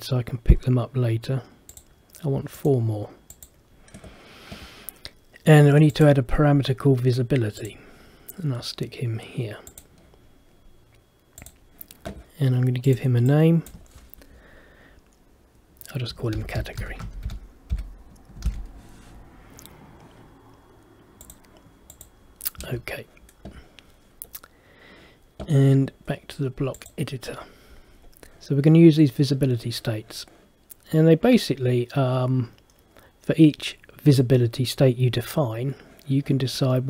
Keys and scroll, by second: 16.5 shift+c, 22.7 Escape.